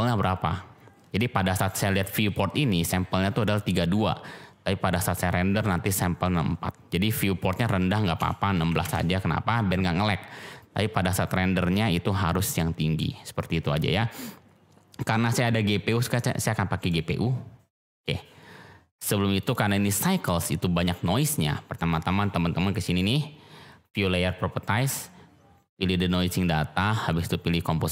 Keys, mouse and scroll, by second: 7.6-11.4 drag, 15.1-17.0 drag, 19.5 click, 20.7 click, 26.0 click.